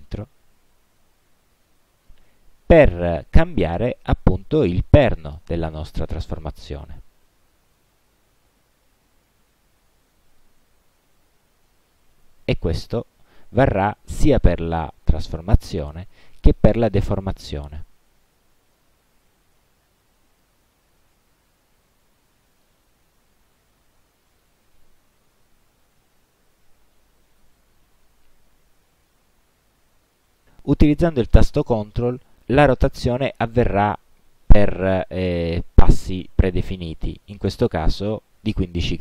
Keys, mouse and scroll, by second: 0.1-2.4 drag, 7.1-10.7 drag, 11.2 ctrl+z, 17.3-20.7 drag, 21.9-22.9 drag, 23.8-24.7 drag, 25.3 ctrl+z, 32.7-39.0 ctrl+drag.